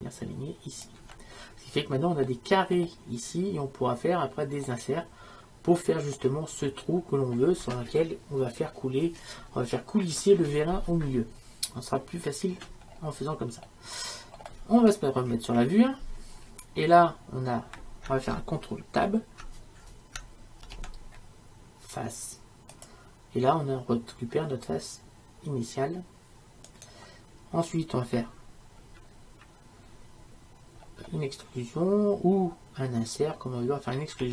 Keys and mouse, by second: 2.3-15.3 middle drag, 15.3 KP_1, 20.7 ctrl+Tab, 26.7-34.2 right drag, 34.2 e.